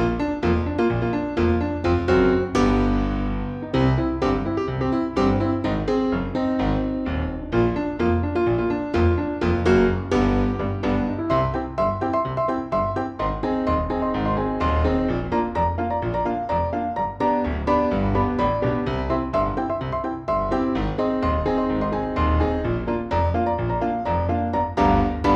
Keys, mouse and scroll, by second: 0.4 middle click, 0.7 click, 1.2 middle click, 1.7 click, 2.2 y, 2.6 middle click, 3.0 click, 3.1 middle click, 3.8 middle click, 4.2 drag, 4.2-4.6 middle drag, 4.6 click, 4.8 middle click, 5.1 scroll down 1, 5.3 click, 6.1 click, 6.4 click, 7.5 middle click, 7.5 scroll up 1, 8.4 middle click, 9.6 click, 9.8 g, 10.1 middle click, 10.3 g, 10.5 middle click, 10.7 ctrl+z, 10.9 g, 11.0 middle click, 11.2 click, 11.4 click, 14.4 click, 14.7 middle drag, 14.9 scroll up 4, 15.8 s, 16.1 middle drag, 16.3 drag, 16.8 s, 17.4 middle click, 17.5 click, 17.7 shift+r, 19.3 click, 19.5 shift+r, 20.2 click, 20.3 ctrl+r, 20.5 middle click, 20.8 click, 21.0 s, 21.5 e, 22.0 middle click, 22.2 click, 22.6 s, 23.0 shift+a, 23.4 middle drag, 23.7 click, 24.4 click, 24.9 click.